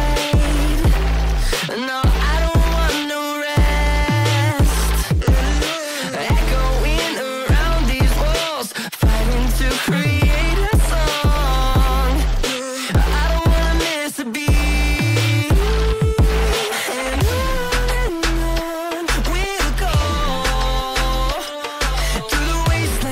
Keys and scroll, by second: 0.1 c, 0.6 Escape, 5.2 F3, 7.3 shift+F2, 7.5 F3.